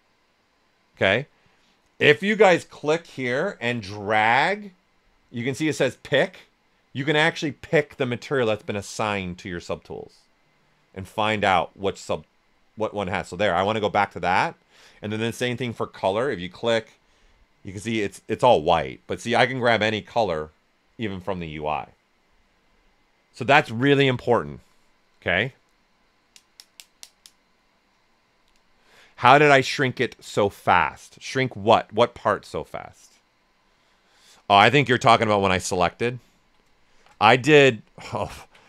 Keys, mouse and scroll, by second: 0.9 1, 3.6-13.6 drag, 16.3-36.0 drag, 36.1 ctrl+right click, 36.8-37.6 typing, 37.2 right click, 37.7 alt+right click.